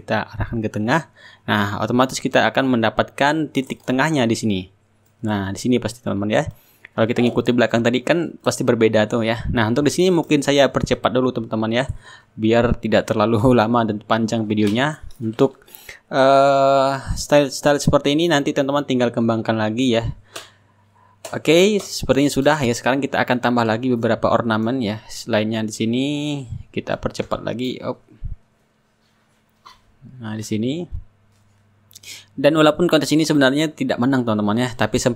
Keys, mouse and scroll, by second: 2.7 click, 4.2 click, 5.8 click, 7.6 click, 8.7 Return, 9.2 click, 9.4 middle click, 9.6 click, 9.9 click, 10.0 \, 10.0 Return, 10.1 click, 10.3 click, 10.6 click, 10.7 Return, 10.9 click, 11.2 ctrl+click, 11.4 click, 11.8 click, 12.2 click, 12.6 middle click, 12.8 click, 13.0 click, 13.2 click, 13.5 click, 13.5 Return, 13.5 middle click, 13.9 click, 14.1 click, 14.2 click, 14.4 middle click, 14.5 click, 14.7 click, 14.9 click, 15.5 click, 15.6 shift+right click, 16.0 click, 16.1 click, 16.3 click, 16.5 click, 16.9 click, 17.1 click, 17.4 click, 17.5 click, 17.5 Return, 17.8 click, 18.0 click, 18.2 click, 18.4-21.0 shift+drag, 18.4 shift+right click, 20.8-25.0 right drag, 22.4-25.0 drag, 25.6 click, 27.0 click, 29.2 click, 31.0 ctrl+z, 32.6 click, 34.8 Return.